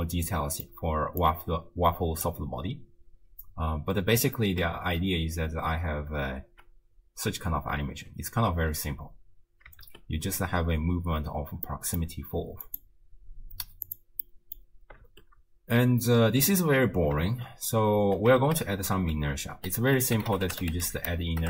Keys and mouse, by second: 1.2-2.3 drag, 3.0 space, 4.8 shift+space, 6.5 shift+space, 8.0 shift+space, 9.9 shift+space, 11.3 space, 11.7 click, 12.7 click, 13.9 click, 14.3 middle click, 15.1 shift+space, 17.3 shift+space, 18.0 space, 19.2 ctrl+a.